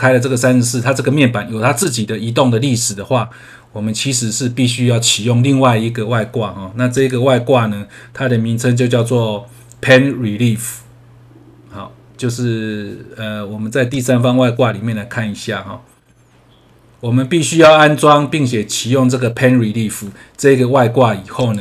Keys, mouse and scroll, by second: 6.9 click, 7.8 scroll down 1, 12.1-13.3 scroll down 1, 13.8 click, 14.8 scroll down 1.